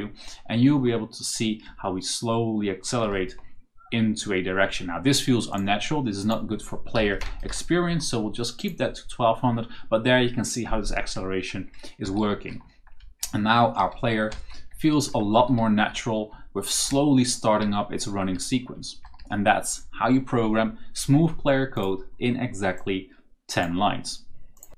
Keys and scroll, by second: 1.5 a, 3.0 d, 6.8 Left, 7.1-7.9 typing, 10.8-17.5 typing, 18.6 d, 19.1 s.